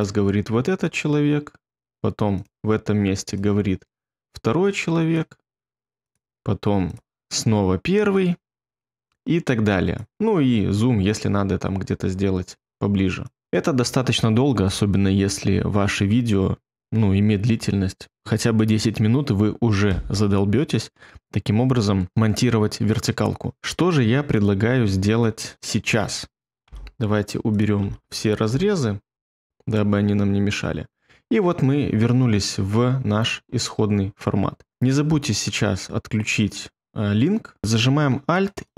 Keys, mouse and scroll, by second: 26.6 BackSpace, 27.8 BackSpace, 28.5 BackSpace, 29.2 BackSpace.